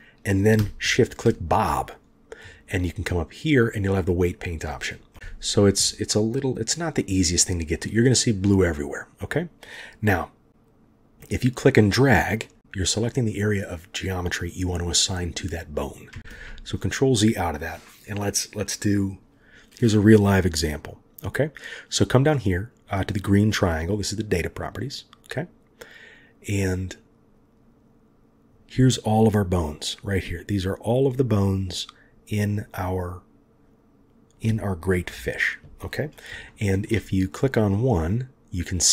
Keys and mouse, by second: 3.4-5.1 drag, 6.9-9.6 middle drag, 11.2-16.5 drag, 16.3 ctrl+z, 22.8 click, 27.0-28.5 drag, 35.0 KP_3, 36.5 shift+click.